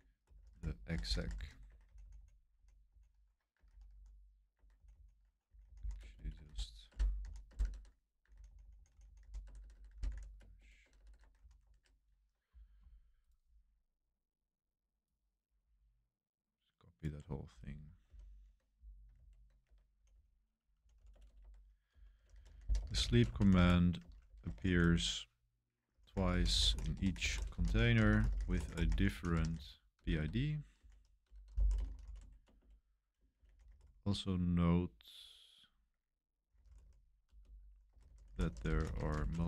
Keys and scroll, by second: 0.0-2.1 typing, 3.3-6.9 typing, 8.2-11.8 typing, 18.1 super+7, 19.1 super+v, 19.6 Escape, 19.9-34.1 typing, 36.2-39.4 typing.